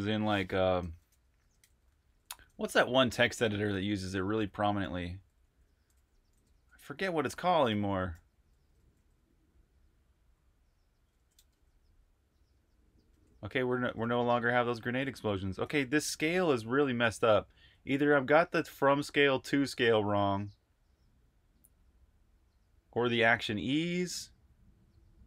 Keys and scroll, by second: 1.3-11.5 typing, 12.8-14.9 typing, 15.5 super+q, 16.3-17.0 typing.